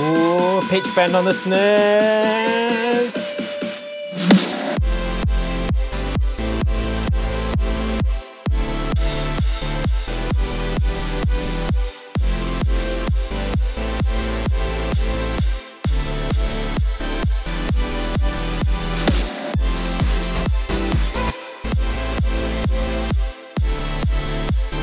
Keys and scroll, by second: 19.9 super+d, 21.2 space.